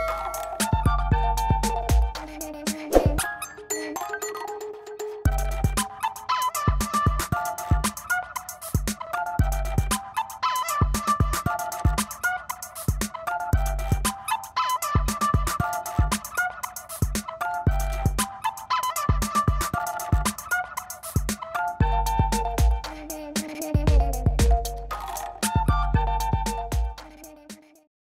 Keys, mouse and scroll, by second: 0.0 click, 2.5 click, 5.0 click, 5.3-6.8 scroll, 6.8-7.3 scroll down 1, 7.3-9.1 scroll down 2, 9.2 middle click, 10.5-11.3 scroll down 3, 11.3 click, 19.9 click, 23.0-24.1 drag, 27.6 click.